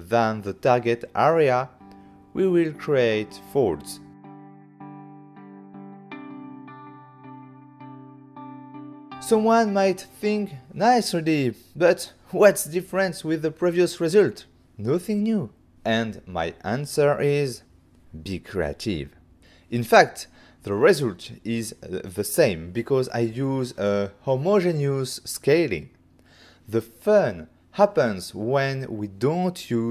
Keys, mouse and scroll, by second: 1.5 Return, 3.2 Return, 7.9 middle click, 9.9 ctrl+middle click, 11.4 middle click, 16.6 shift+middle click, 20.6 click, 22.8 middle click, 24.0 ctrl+middle click, 25.6 ctrl+f, 26.7 click, 27.4 click, 28.5 Return.